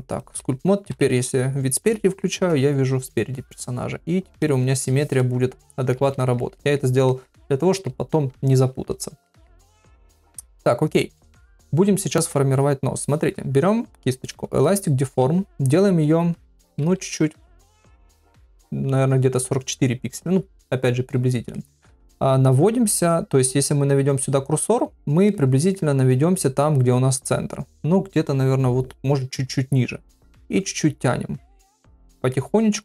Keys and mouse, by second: 0.9 KP_1, 4.4 click, 5.6 shift+middle click, 6.2 ctrl+middle click, 6.6 middle click, 7.1 ctrl+middle click, 7.5 middle click, 9.3 ctrl+middle click, 9.6 middle click, 14.6 middle click, 16.4 ], 16.8 [, 17.0 [, 21.5 middle click, 25.3 middle click, 30.1-31.1 drag, 31.7 click, 32.3 middle click.